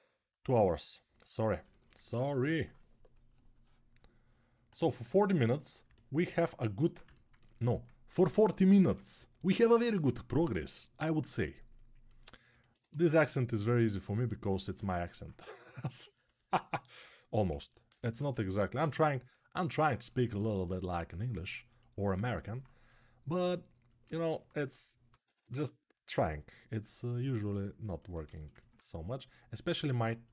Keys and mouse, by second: 8.0 g, 8.5 [, 8.6 [, 12.5 1, 17.2 g, 17.7 ], 25.2 ], 27.6-30.3 ctrl+alt+drag.